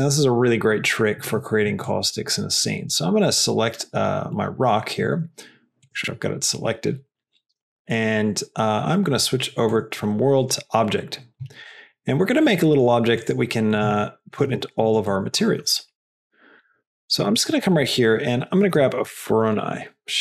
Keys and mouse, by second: 2.7 click, 5.9 click, 6.5 click, 9.7 click, 11.7 middle click, 12.6 middle click, 13.2 click, 13.6 click, 14.1 shift+click, 14.4 g, 15.7 shift+middle click, 16.5 middle click, 17.2 middle click, 17.4 shift+a.